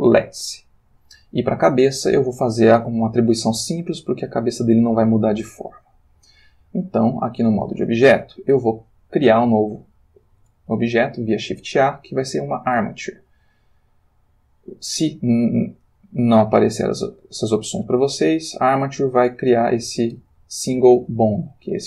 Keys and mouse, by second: 1.6-2.2 drag, 10.2 shift+a, 19.8 click, 21.6 g.